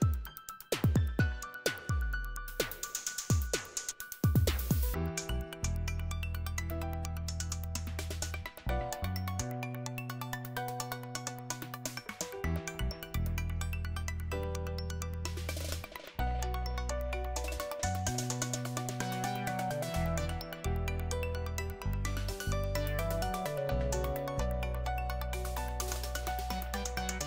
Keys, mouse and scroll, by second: 0.0 click, 0.4 click, 2.2 click, 3.7-5.1 scroll down 2, 5.1-6.6 scroll down 1, 10.9 click, 12.8 click, 16.1 click, 18.3 click, 20.7 click, 23.8 click.